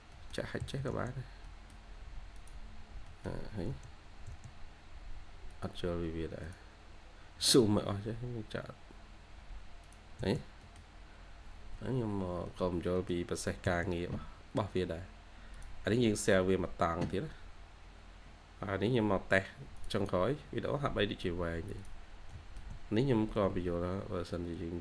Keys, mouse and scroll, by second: 0.5 h, 1.3 middle click, 2.8 scroll down 1, 2.9 middle click, 3.6 space, 3.8 scroll up 1, 4.2 space, 6.8-7.3 scroll down 1, 7.3 middle click, 7.8 scroll up 1, 10.1 space, 10.3 scroll down 1, 10.5 middle click, 11.0 scroll up 1, 11.8 scroll down 1, 12.4 middle click, 13.4 typing, 20.3-21.1 scroll down 1, 22.2 middle click, 22.9 scroll up 1.